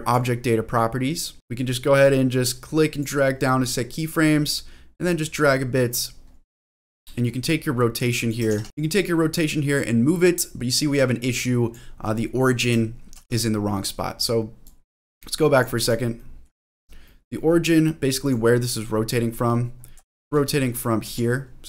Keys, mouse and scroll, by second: 0.1 click, 2.0-3.0 drag, 4.6-6.0 drag, 6.9 click, 7.4 click, 8.5 ctrl+z, 8.6 ctrl+z, 9.7-11.7 drag, 13.1 ctrl+z, 15.0 click, 15.8 click, 16.2 middle click, 16.6-17.0 scroll down 2, 17.0 middle click, 17.4-17.8 scroll down 1, 17.8 middle click, 18.2 click, 18.6-20.1 scroll up 9, 20.3 shift+middle click, 21.0 r.